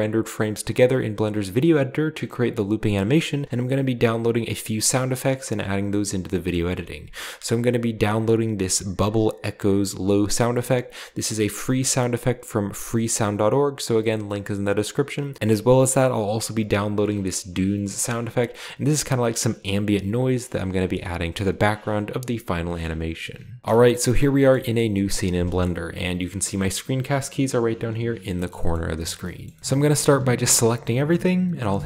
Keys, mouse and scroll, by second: 15.3-18.7 drag, 23.6 ctrl+b, 23.6-25.0 shift+middle drag, 24.0-25.0 shift+scroll down 1, 28.4 shift+middle drag, 28.7-29.1 shift+middle drag, 28.8-29.6 shift+scroll up 1, 29.4 shift+middle click, 30.1 typing.